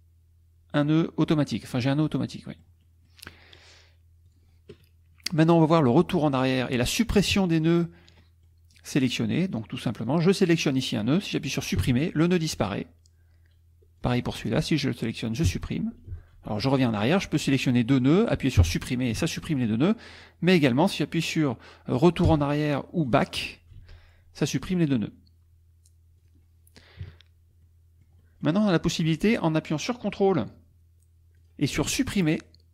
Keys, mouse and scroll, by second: 1.9 middle click, 4.3 click, 6.1 middle click, 7.3 KP_Subtract, 8.2 middle click, 8.7 middle click, 8.8 click, 9.3 click, 10.1 click, 11.8 Delete, 14.0 click, 15.5 Delete, 16.1 ctrl+z, 17.0 ctrl+click, 18.6 Delete, 19.2 ctrl+z, 20.2 click, 22.3 BackSpace, 23.8 ctrl+z, 24.6 click, 26.2 click, 27.0 KP_Subtract, 27.6-28.6 drag, 29.1 middle click, 31.4 click.